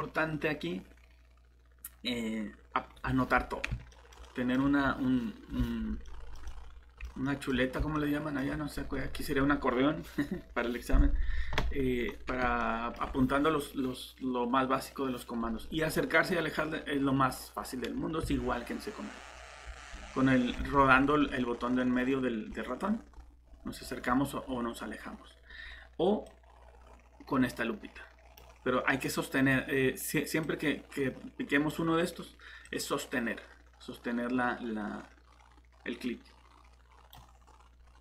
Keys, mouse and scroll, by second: 3.9 typing, 6.1-6.4 typing, 7.7 scroll up 1, 7.9 middle click, 8.3 typing, 15.9 scroll down 1, 16.2 scroll up 1, 16.9 scroll down 1, 17.2 scroll up 1, 17.5 scroll down 1, 18.2 alt+shift+Tab, 18.6 scroll up 1, 19.6 scroll down 1, 19.9 scroll up 1, 20.5 alt+Tab, 21.2 scroll down 1, 21.5 scroll up 1, 22.5 scroll down 1, 22.7 scroll up 1, 23.4 scroll down 1, 24.0 scroll up 1, 24.5 scroll down 1, 24.7 scroll up 1, 25.0 scroll down 1, 26.2 click, 37.4 scroll up 1, 37.8 scroll down 1.